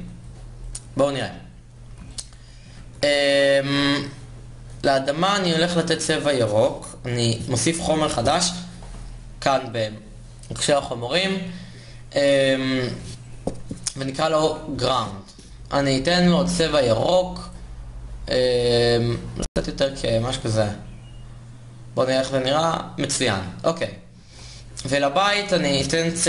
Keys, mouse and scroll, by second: 2.5 shift+z, 17.1-20.7 drag, 22.1 shift+z, 25.8 shift+z.